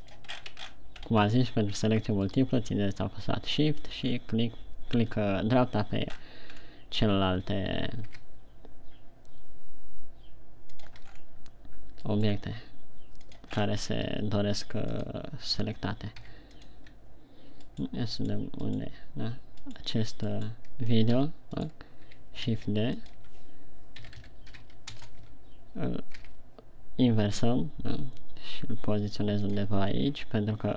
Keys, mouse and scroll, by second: 0.5 shift+click, 0.7-1.1 shift+scroll up 6, 1.5 scroll up 2, 2.7 right click, 4.6 scroll down 4, 6.5-7.1 scroll up 5, 8.6 g, 11.3 click, 11.8 scroll down 5, 12.6 right click, 14.0 scroll up 3, 14.4 r, 15.4 click, 16.8 g, 17.3 click, 18.4 right click, 18.9 right click, 19.2 right click, 20.3 right click, 20.8 right click, 21.6 g, 22.1 right click, 23.0 shift+d, 23.5 click, 23.7 Tab, 24.4 s, 25.7 Tab, 26.6 g, 30.1 click.